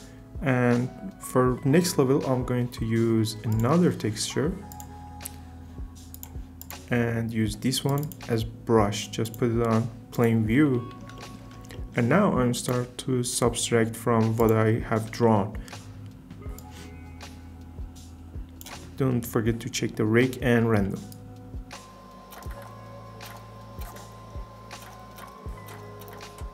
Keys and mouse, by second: 3.5 click, 4.7 click, 9.2-10.2 drag, 10.5 middle click, 12.5-14.6 drag.